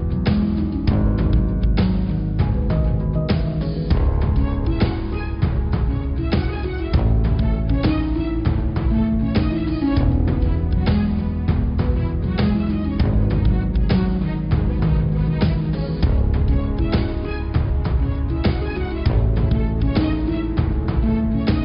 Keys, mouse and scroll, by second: 0.0 scroll up 2, 0.3 middle click, 0.8 click, 1.1 middle click, 1.6 shift+click, 2.4 middle click, 3.3 click, 3.6-5.1 middle drag, 5.1 click, 5.6-6.6 scroll up 2, 6.6 click, 7.6 click, 8.4 g, 14.1 click, 15.0 g, 17.1 Tab, 17.3 middle click, 18.0-18.8 scroll down 13, 18.8 middle click, 19.2-19.9 scroll up 5, 19.9 middle click, 20.4 Tab, 20.6 click, 21.5 click.